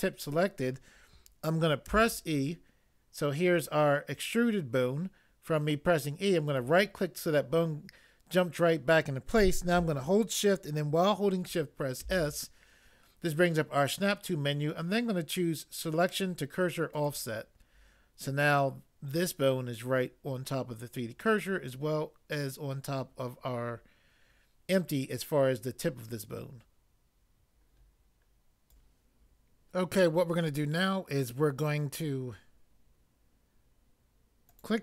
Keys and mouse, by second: 1.8 e, 11.9 s.